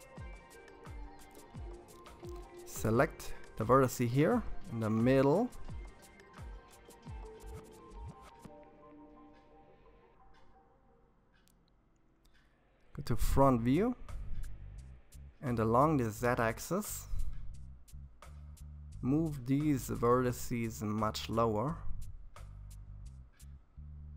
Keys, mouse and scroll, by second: 0.9 click, 4.2 shift+click, 5.1 shift+click, 5.8-8.5 middle drag, 8.5 shift+click, 10.8 KP_1, 12.2-14.4 scroll up 4, 14.4 g, 18.4-20.0 middle drag, 20.0-20.8 scroll down 4, 20.8 KP_3.